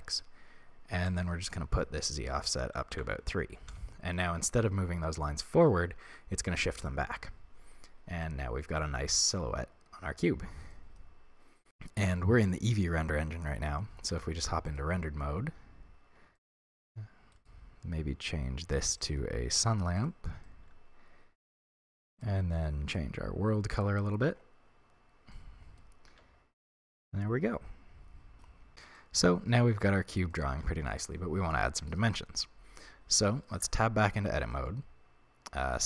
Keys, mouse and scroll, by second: 1.0-8.2 drag, 3.7 Return, 8.2-17.3 middle drag, 14.1 z, 16.6-17.3 scroll down 2, 17.3 right click, 19.0 click, 20.0 click, 20.4-22.1 middle drag, 22.1 click, 25.3-35.8 middle drag, 26.1 z, 26.6-27.0 scroll up 2, 33.5 Tab, 34.2 a.